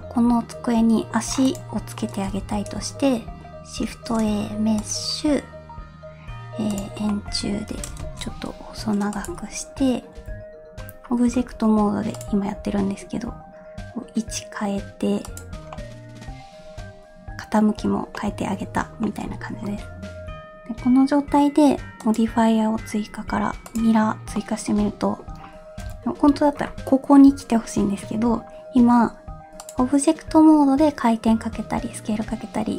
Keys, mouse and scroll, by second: 1.3 scroll down 1, 1.4 click, 2.0 middle click, 2.4 h, 3.8 shift+a, 7.1-7.7 middle drag, 7.7 s, 10.1 KP_1, 10.8-11.3 scroll up 1, 11.3 r, 12.5 g, 15.7-17.8 middle drag, 17.9-18.2 scroll down 3, 18.1-18.5 middle drag, 18.6-19.0 scroll up 2, 19.0 scroll down 1, 19.0 middle click, 22.0-23.8 drag, 24.3-25.3 middle drag, 25.4-25.8 scroll up 1, 25.8 KP_1, 29.6 click.